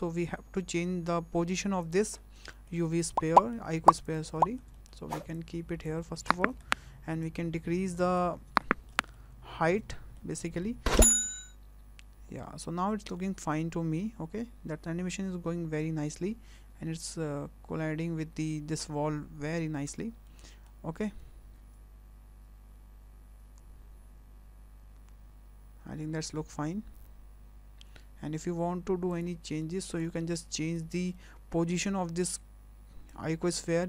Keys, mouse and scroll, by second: 0.6 space, 1.8 click, 2.2 scroll up 3, 2.5 shift+middle click, 2.8 scroll down 1, 3.0 middle click, 3.8 scroll up 1, 4.1 click, 4.4 shift+middle click, 4.7 middle click, 5.4 click, 6.0 middle click, 6.6 scroll up 2, 7.2 click, 8.4 scroll down 2, 8.6 shift+middle click, 9.1 middle click, 9.9 shift+middle click, 10.4 scroll down 1, 10.6 middle click, 11.0 space, 20.3 shift+middle click, 28.3 space, 29.1 click, 29.6 shift+middle click, 30.1 middle click, 30.4 scroll up 5, 30.8 shift+middle click, 31.1 middle click, 33.1 click.